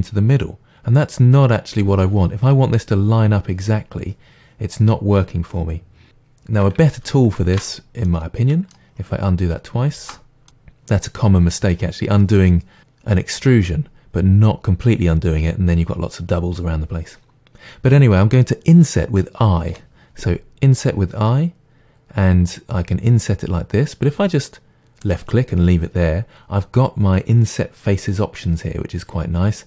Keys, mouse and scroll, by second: 6.9 ctrl+z, 8.1 middle drag, 8.4-10.5 middle drag, 9.0-9.5 scroll down 2, 9.5-10.0 scroll down 1, 10.0 ctrl+z, 26.4 click.